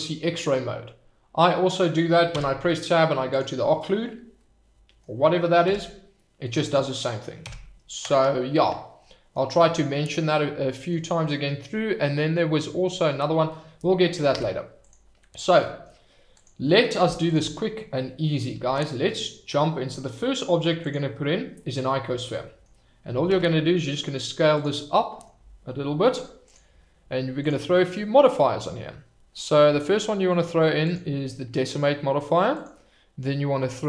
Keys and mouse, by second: 2.3 Tab, 4.4 middle click, 5.6 Tab, 7.4 Tab, 8.9 middle click, 10.2 click, 14.0 click, 14.3 Tab, 15.6 middle drag, 17.0 x, 18.6 shift+a, 21.6-22.1 middle drag, 22.4 middle click, 23.1 s, 23.3 z, 24.5 click, 25.0 middle drag, 26.4 click, 27.5-30.9 drag, 32.6-33.8 drag.